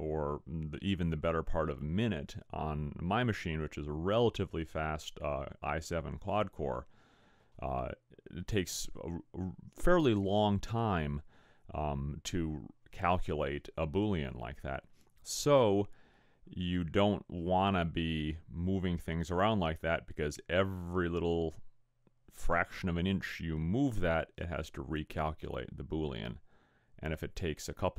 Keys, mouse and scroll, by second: 18.1 click.